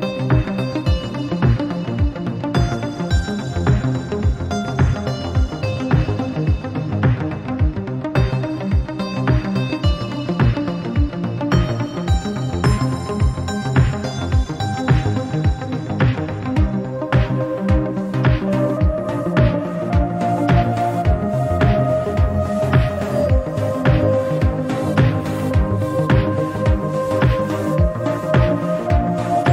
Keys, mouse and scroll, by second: 0.1 scroll up 1, 0.3-0.7 shift+middle drag, 0.7 click, 1.6 click, 3.1-4.2 middle drag, 4.2 KP_1, 4.6 scroll up 4, 4.8-5.3 shift+middle drag, 5.3 alt+z, 5.6 shift+middle click, 5.8-6.6 scroll up 4, 6.0 shift+middle drag, 6.6 shift+middle click, 7.3 drag, 8.2-8.7 scroll down 1, 8.7 click, 10.0 shift+middle click, 10.2-10.7 scroll up 6, 10.7-11.4 shift+middle drag, 11.4 g, 14.3-14.9 scroll down 18, 14.9-15.4 middle drag, 15.4 alt+z, 15.9 middle click, 16.4 click, 16.7 drag, 17.2 alt+z, 17.3-18.0 scroll up 6, 18.0-18.6 drag, 18.6 scroll up 2, 18.8-20.8 shift+middle drag, 20.8 click, 21.4 Tab, 22.9 s, 25.9-27.4 drag, 27.7 Tab, 27.9 click, 28.2 Tab.